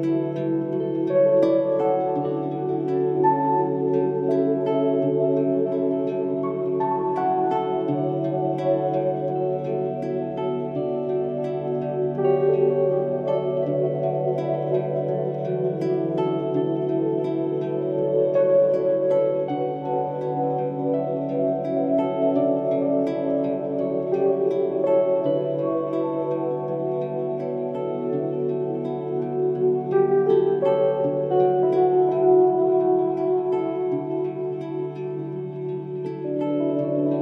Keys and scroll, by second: 0.4 ctrl+z, 3.6 ctrl+z, 6.1 ctrl+z, 6.9 ctrl+z, 7.7 ctrl+i, 11.9 ctrl+s, 13.7 ctrl+g, 14.3 ctrl+alt+g, 14.7 alt+Delete, 17.6 ctrl+alt+g, 18.8 ctrl+z, 22.1 ctrl+z, 22.9 ctrl+z, 23.4 ctrl+shift+z, 23.6 ctrl+alt+g, 24.4 ctrl+z, 24.6 ctrl+Return, 25.4 ctrl+d, 26.2 ctrl+Return, 26.8 ctrl+shift+i, 27.4 ctrl+d, 29.3 ctrl+z, 30.5 ctrl+z, 32.2 ctrl+alt+g, 34.9 ctrl+s, 36.4 ctrl+g.